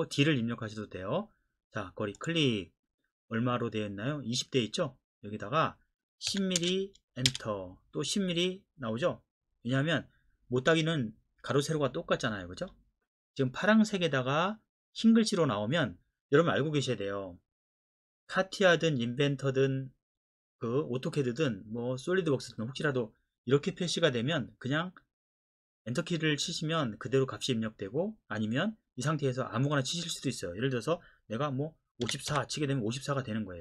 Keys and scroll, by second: 6.3-7.3 typing, 32.1 typing.